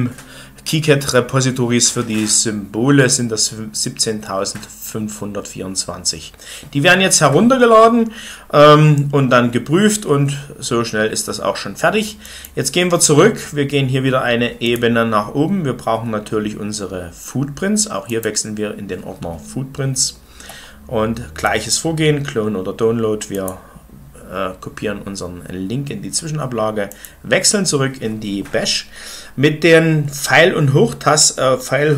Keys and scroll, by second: 29.1 Up, 30.0 Down, 30.5 Up, 30.7 Up, 31.2 Down, 31.5 Down.